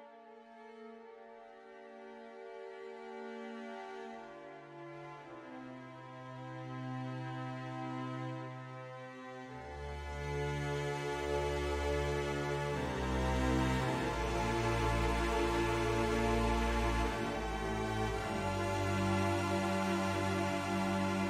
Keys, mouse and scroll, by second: 1.0 ctrl+z, 2.2 click, 3.6 middle click, 4.6 click, 8.1 click, 16.8 middle click, 18.6 click.